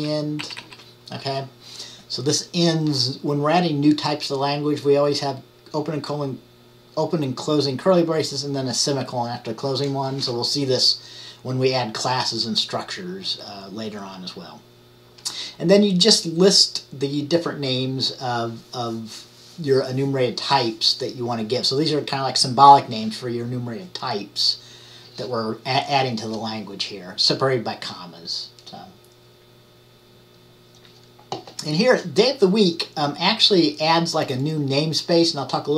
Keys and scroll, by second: 0.1 Left, 0.5 Right, 0.7 Right.